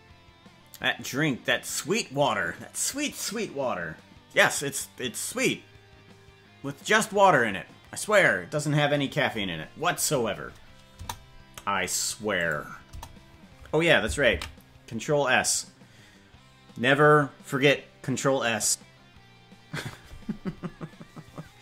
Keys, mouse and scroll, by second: 12.8 KP_0, 16.1 ctrl+s.